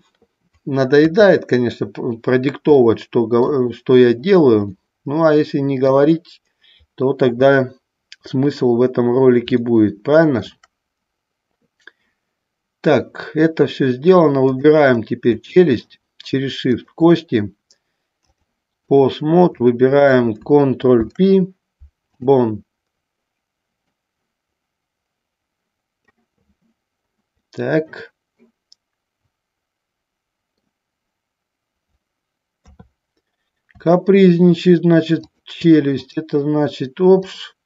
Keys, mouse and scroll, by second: 1.2 KP_3, 3.0 shift+middle click, 4.9-6.1 shift+middle drag, 9.9 shift+middle click, 15.5 shift+middle click, 17.0 shift+click, 18.5 click, 19.7 click, 21.2 ctrl+p, 24.0-26.2 drag, 27.7-30.8 middle drag, 32.7 KP_3, 34.1 shift+middle click, 35.3 click, 37.4 click.